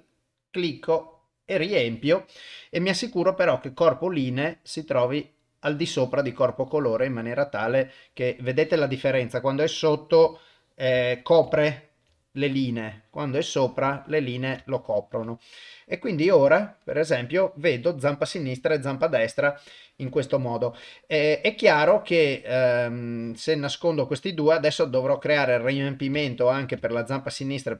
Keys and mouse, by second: 3.1 click, 3.7 click, 5.3 click, 9.8 click, 10.4 ctrl+middle click, 11.1 shift+middle click, 11.6 ctrl+middle click, 13.3 click, 14.0 ctrl+middle click, 14.7 shift+middle click, 16.5 click, 16.8 click, 23.1 click, 24.8 click, 26.2 ctrl+middle click, 26.9 shift+middle click.